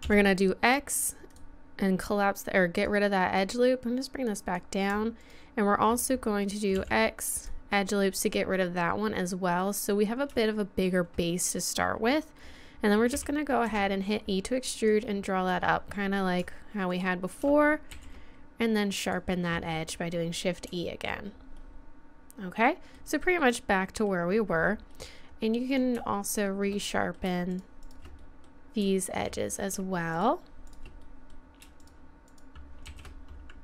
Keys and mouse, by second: 0.0 n, 0.0 x, 2.8-4.5 right drag, 3.4 click, 4.5 click, 5.4-6.7 right drag, 6.7 x, 8.8 middle click, 9.2 middle click, 13.1 e, 14.9 click, 16.9-17.9 right drag, 17.9 shift+e, 23.5 middle click, 24.3 middle click, 24.6 middle click, 25.7-26.7 right drag, 25.9 click, 26.7-29.5 middle drag, 31.0 middle click, 32.9 shift+e.